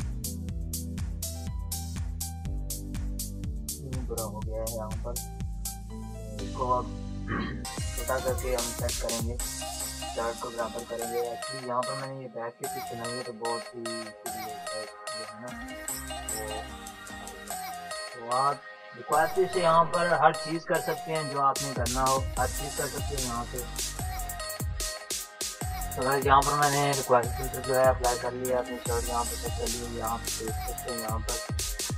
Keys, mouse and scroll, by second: 0.0-0.7 typing, 1.0-5.2 drag, 4.1 Escape, 5.2 ctrl+shift+x, 6.6-10.1 typing, 7.1 click, 7.2 click, 7.9 click, 11.0-12.4 drag, 12.4-13.0 typing, 13.1 click, 13.1-15.0 drag, 15.4-16.7 typing, 17.1 click, 18.8-20.4 typing, 20.8 click, 27.2 ctrl+-, 28.2 click, 28.2 click, 31.2 ctrl+-, 31.6 ctrl+=.